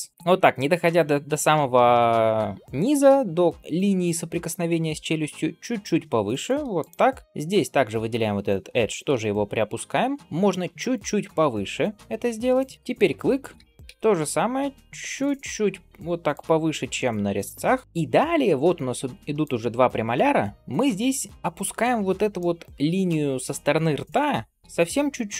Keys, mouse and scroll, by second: 7.1 shift+middle click, 7.2-7.8 scroll up 1, 7.8-8.6 scroll up 1, 8.6 g, 12.7 middle click, 12.7 alt+click, 13.4 g, 16.5 scroll down 1, 16.8 middle click, 17.8 middle click, 17.8 scroll up 2, 18.3-18.8 scroll down 1, 18.8 scroll up 1, 19.3 click, 20.2 scroll up 3, 21.3 alt+click, 22.2 middle click, 23.2 scroll down 1, 23.5-24.4 scroll up 1, 24.4-24.8 scroll up 1, 24.4 g.